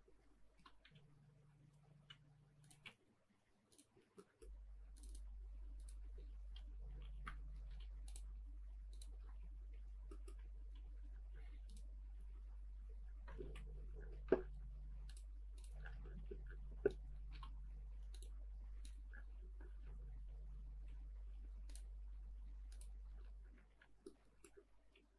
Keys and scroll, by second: 4.0 space, 6.5 shift+f, 7.6 m, 9.2 space, 9.3 Escape, 10.5 ctrl+s, 15.9 space, 19.2 space, 23.2 space, 24.7 ctrl+s.